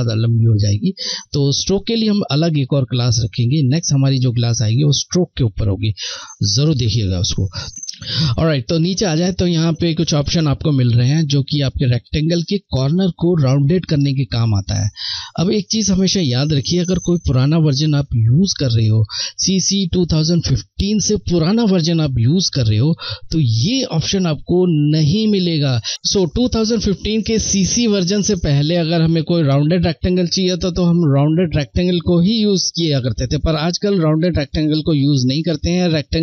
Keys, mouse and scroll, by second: 30.8 click, 35.4 click.